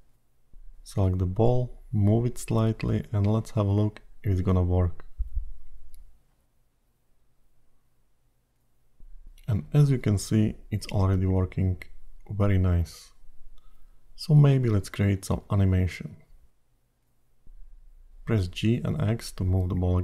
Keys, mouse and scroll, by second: 0.1 scroll down 1, 1.1 click, 2.6 g, 6.1 click, 7.1 g, 17.9 click.